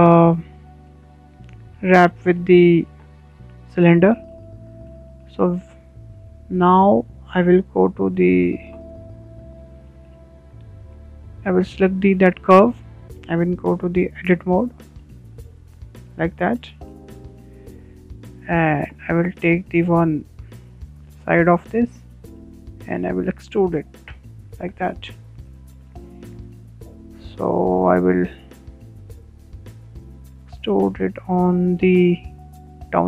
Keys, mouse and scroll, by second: 0.8-1.1 scroll up 2, 1.1-4.6 middle drag, 4.6-4.9 scroll down 3, 4.9-9.3 middle drag, 9.3 click, 11.2-11.6 drag, 11.6-12.3 shift+middle drag, 12.3 click, 12.7-13.4 scroll up 4, 13.4-14.4 shift+middle drag, 14.4 click, 15.1-17.8 middle drag, 17.8 click, 18.5 Tab, 18.9-19.2 scroll down 4, 19.2-19.7 middle drag, 19.7-20.2 scroll up 3, 20.2-23.6 shift+middle drag, 24.2 click, 24.5-26.8 middle drag, 26.8 e, 28.2 scroll down 4, 28.4-30.4 middle drag, 30.4 e, 32.5 e.